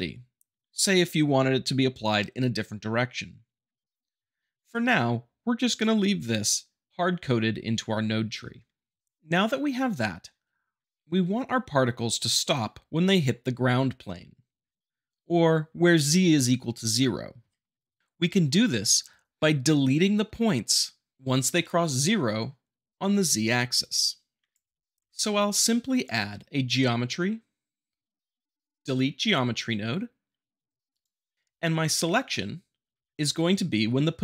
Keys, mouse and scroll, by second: 23.8-24.8 drag, 25.1 shift+a, 30.9 click.